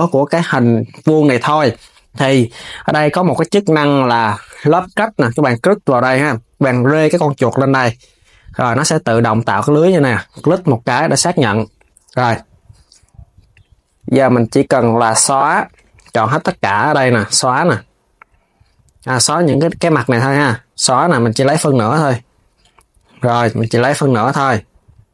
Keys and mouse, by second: 4.8-7.9 drag, 10.1-13.2 drag, 14.0 click, 14.7 alt+shift+click, 15.7 alt+shift+click, 16.8 click, 19.2 click, 21.3 x, 22.3 Tab, 22.7 KP_3, 23.3 click, 23.8 Tab.